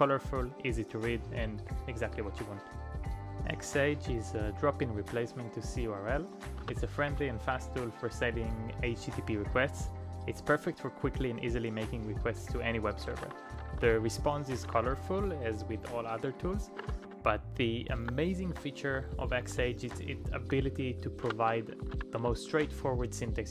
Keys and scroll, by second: 6.3-7.2 typing, 7.4 Return, 13.0-15.7 typing, 16.8 ctrl+a, 17.0 [, 18.0 ctrl+u, 18.5 ctrl+u, 18.9 ctrl+u, 21.2-22.5 typing.